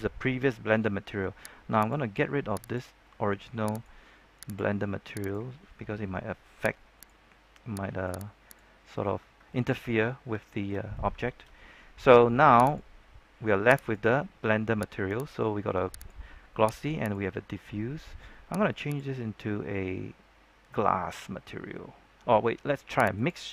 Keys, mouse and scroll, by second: 1.7 click, 3.7 right click, 4.4 click, 6.1-6.8 scroll down 1, 6.9 right click, 8.7-9.3 scroll up 1, 9.4 shift+middle click, 9.9-11.0 scroll up 3, 11.2 shift+middle click, 12.6 right click, 18.8 click.